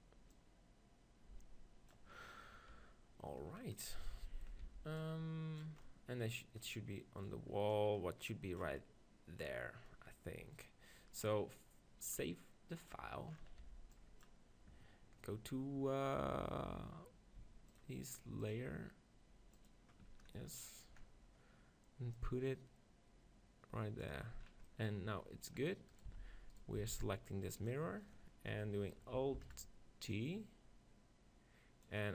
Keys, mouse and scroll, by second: 0.5-2.0 right drag, 2.3-6.9 middle drag, 4.7 b, 7.7-9.6 drag, 7.7 middle click, 8.8-10.6 middle drag, 12.4-13.9 drag, 13.6 b, 13.9-16.8 middle drag, 17.7-21.3 drag, 20.4-22.2 middle drag, 22.2-24.1 drag, 24.5-26.6 middle drag, 26.0-28.5 right drag, 26.1 z, 26.8 b, 28.7 KP_3, 29.5 alt+d, 29.6-31.6 drag, 30.1-31.5 right drag, 31.6 right click.